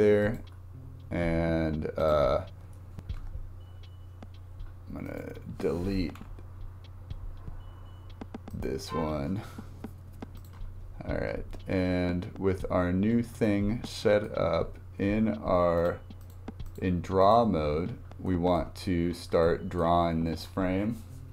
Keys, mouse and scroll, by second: 2.0-2.8 drag, 3.3 Tab, 5.1-6.2 drag, 6.2 Delete, 10.4-10.8 drag, 12.8 scroll up 2, 13.9-15.8 shift+middle drag, 15.8-17.8 drag, 17.8 scroll up 2, 18.3 shift+middle click, 18.9-19.4 scroll down 4, 19.4 shift+middle click, 20.1-20.8 scroll up 1.